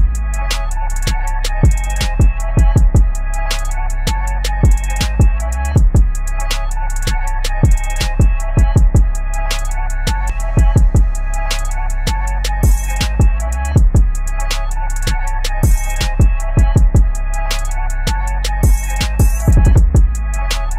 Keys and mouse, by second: 1.5 a, 2.2-5.1 drag, 5.1 v, 5.5-8.8 drag, 10.4 a, 10.8-13.7 drag, 13.7-17.0 drag, 20.3-20.6 typing.